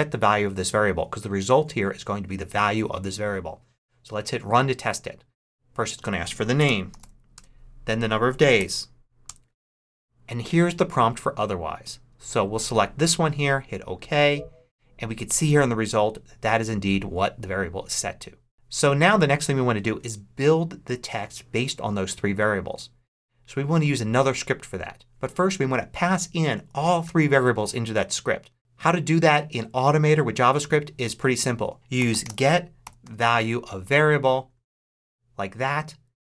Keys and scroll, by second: 6.2-7.3 typing, 8.5 6, 9.2 Return, 31.6-33.4 typing.